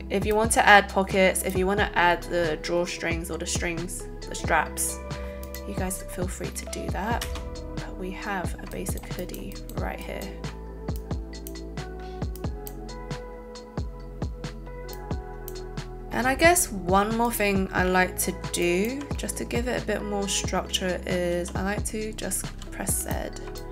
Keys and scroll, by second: 7.2 space, 22.4 z.